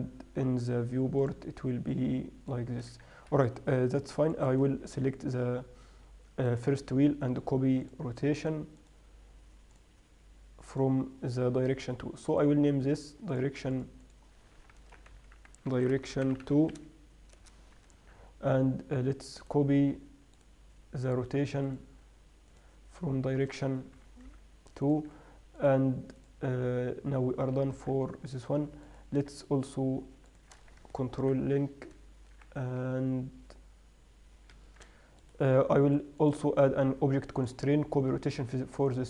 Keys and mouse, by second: 0.0-3.3 drag, 4.6-6.8 middle drag, 6.8-8.6 right drag, 12.6 right click, 15.6 click, 16.0 right click, 19.7-21.9 right drag, 21.9-22.5 middle drag, 22.5-24.8 right drag, 25.9-28.1 right drag, 28.0 z, 31.5 ctrl+l, 35.5-36.5 right drag, 36.5-37.4 middle drag, 37.4-38.1 right drag.